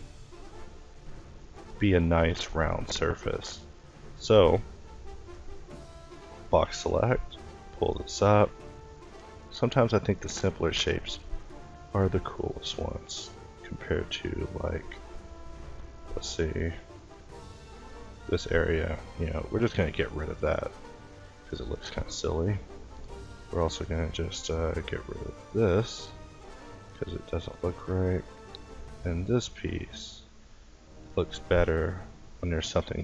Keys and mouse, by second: 0.3-3.4 middle drag, 3.4 a, 4.6 b, 5.4 middle click, 8.2 Tab, 10.7 Tab, 12.7 a, 13.1 a, 13.6 a, 14.8 l, 16.1-19.0 typing, 21.3 a, 21.7 a, 22.4 l, 22.9 k, 24.1 l, 24.6 x, 27.2 a, 27.5 a, 28.4 l, 32.8-33.0 typing.